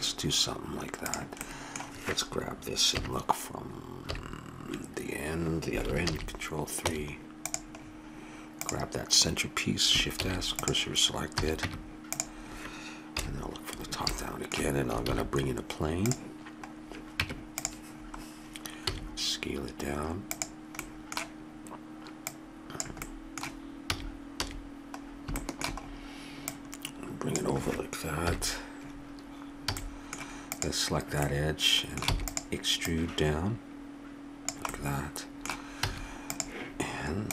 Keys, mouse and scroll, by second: 1.1 click, 1.4-2.9 middle drag, 2.9 KP_1, 4.0 KP_3, 6.1 ctrl+KP_3, 6.8 Tab, 8.6-10.3 drag, 10.2 shift+s, 11.3 a, 11.6 Tab, 13.1 KP_7, 14.1 middle click, 15.1 shift+a, 16.1 click, 16.6 middle click, 17.2 Tab, 18.9 s, 20.8-22.2 middle drag, 22.2-24.1 drag, 23.9 a, 24.4 a, 26.5-28.2 drag, 28.2 KP_1, 29.7 a, 29.8 middle click, 30.5-34.7 drag, 32.0 e, 34.9 middle click, 35.9 a, 36.3-37.3 right drag.